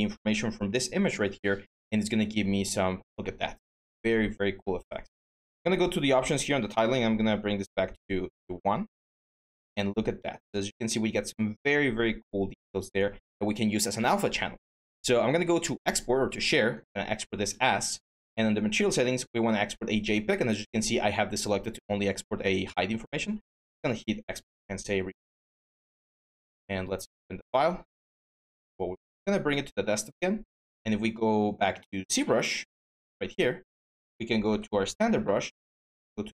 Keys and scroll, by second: 8.7 1, 8.8 Return, 30.0 alt+Tab, 35.8-36.3 typing.